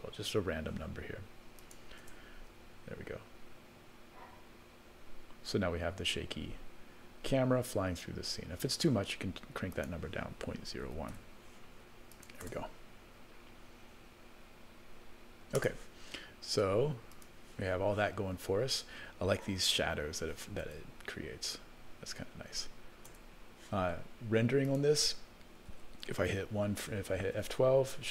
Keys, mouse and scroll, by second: 1.6 click, 2.0 space, 8.7 space, 9.7-11.3 drag, 12.1 click, 12.4 space, 15.6 space, 17.1 click, 20.6 space, 23.1 space, 24.6 click, 25.7 ctrl+s, 27.0-27.6 scroll up 1, 27.6 F12, 27.6-28.1 scroll up 1.